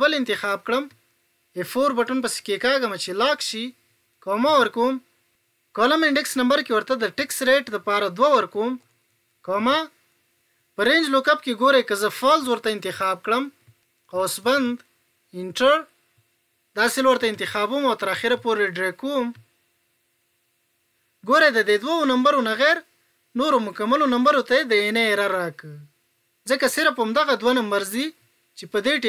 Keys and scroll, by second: 1.5 F4.